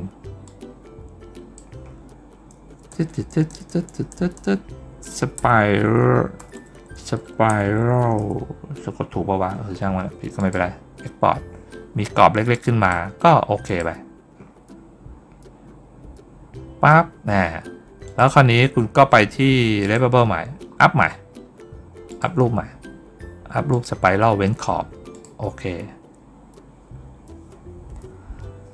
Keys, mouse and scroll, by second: 0.3-1.4 drag, 10.2 click, 12.4 click, 13.5 click, 17.9 click, 19.7 click, 20.6 scroll up 1, 21.5 scroll down 1, 21.9 click, 23.6 click, 25.0 click.